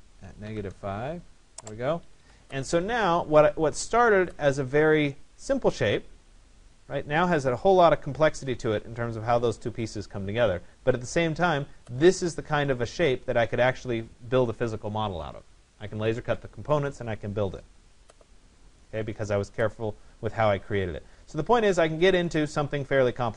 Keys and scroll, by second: 0.5 5.